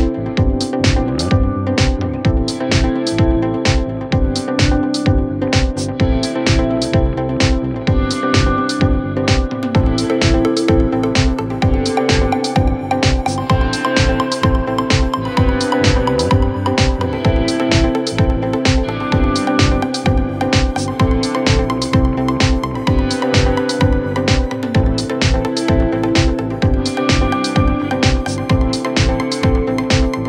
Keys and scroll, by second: 0.2 ], 3.7 4, 9.9 2, 13.0 4, 17.0 ,, 26.9 ., 27.8 ,, 29.1 ctrl+z, 29.8 3.